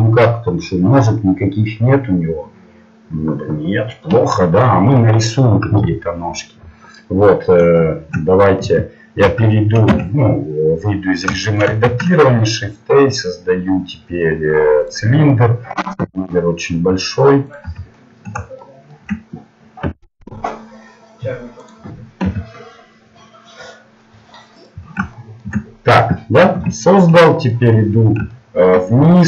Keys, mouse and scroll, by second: 7.5 middle click, 8.7 KP_7, 9.6-11.1 middle drag, 9.9 Tab, 14.9 shift+a, 16.0 s, 17.6 z, 19.8 s, 22.3 g, 25.3 middle click, 26.6 KP_1, 27.9 middle click.